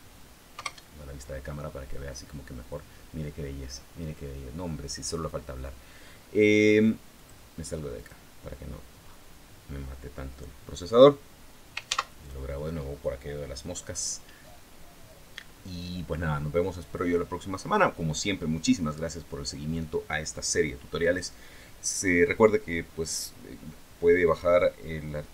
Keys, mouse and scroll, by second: 0.4 KP_0, 6.9 click, 7.7 click, 8.4 scroll down 2, 8.8 scroll up 2, 9.4 scroll down 2, 9.9-10.2 scroll up 2, 10.2 scroll down 2, 11.6 ctrl+s, 12.0 ctrl+click, 14.4-15.1 scroll down 2, 15.1 scroll up 2.